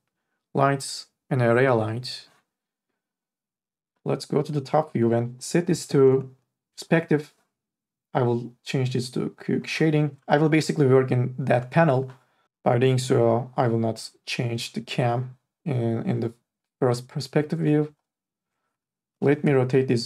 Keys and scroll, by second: 19.1 r.